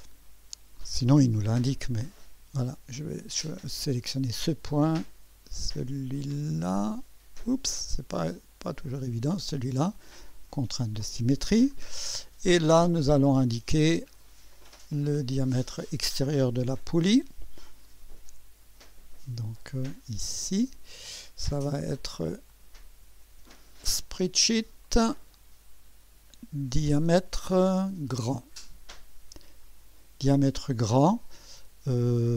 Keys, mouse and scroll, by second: 3.1 click, 4.1 click, 7.6 click, 9.1 click, 10.5 click, 11.7 scroll down 2, 14.1 click, 14.7-16.2 right drag, 18.8 click, 20.3 click, 22.5 click, 23.3-23.9 typing, 24.8 click, 26.6-27.0 typing, 28.2 click.